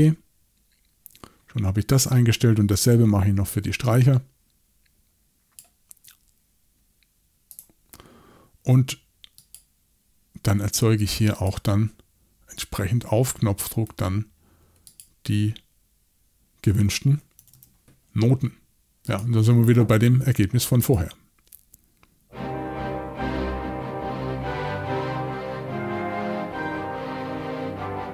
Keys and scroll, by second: 17.4 typing.